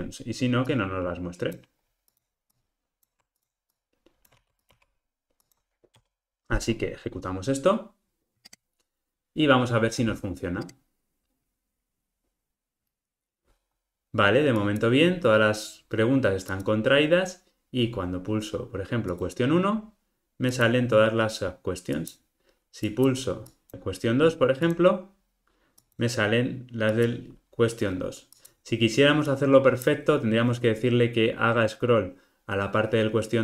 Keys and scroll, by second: 4.4 super+x, 8.4 ctrl+r.